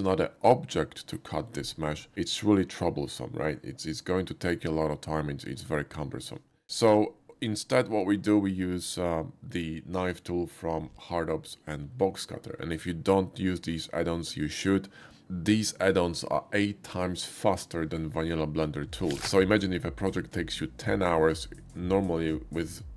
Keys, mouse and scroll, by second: 6.9 typing, 19.6 click, 20.3 click, 21.0-22.8 typing.